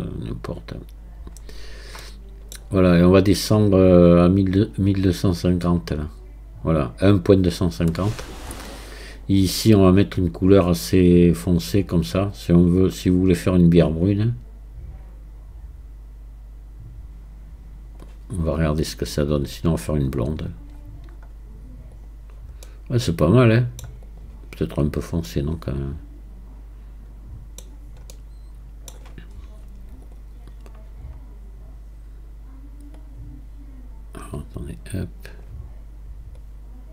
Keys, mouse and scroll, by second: 1.4 scroll up 1, 1.9 scroll up 3, 2.0 middle click, 2.9-3.9 scroll up 1, 3.9-6.9 drag, 9.1-12.1 drag, 19.4-19.8 scroll down 4, 20.4 scroll down 4, 22.0 click, 22.6-24.0 middle drag, 24.0 click, 24.8 scroll up 2, 25.3-27.7 middle drag, 27.7-28.1 scroll down 3, 28.1-29.3 middle drag, 29.3-30.0 scroll up 4, 30.0-33.2 drag.